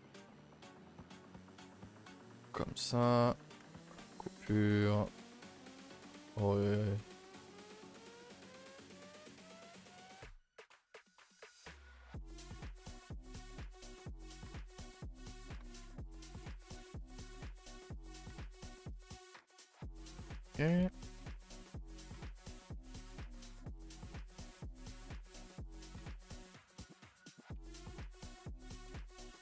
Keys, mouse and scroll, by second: 3.2 a, 3.4 a, 3.8 ctrl+r, 4.7 g, 9.9 ctrl+r, 11.0 s, 12.9 click, 13.3 Tab, 13.9 Tab, 14.3 shift+middle click, 14.5 scroll up 1, 14.6-16.2 typing, 15.1 click, 16.1 click, 17.0 click, 17.8 a, 17.9 a, 18.4 ctrl+r, 19.1 a, 19.2 a, 19.3 scroll down 1, 19.8 shift+middle click, 20.0 scroll up 1, 20.1 Tab, 20.3 a, 20.5 a, 21.0 middle click, 21.3-22.0 scroll up 8, 22.0 shift+middle click, 22.4 scroll up 2, 22.6 Tab, 22.8 a, 23.0 a, 23.2 3, 23.7 c, 25.0 click, 25.3 g, 26.8 r.